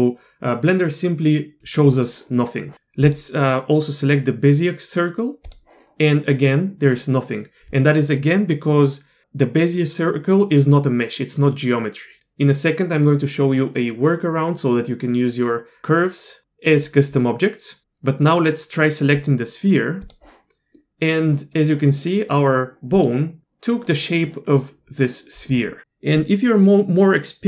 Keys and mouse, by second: 3.1-5.5 drag, 19.2 click, 20.8 click, 23.0 click.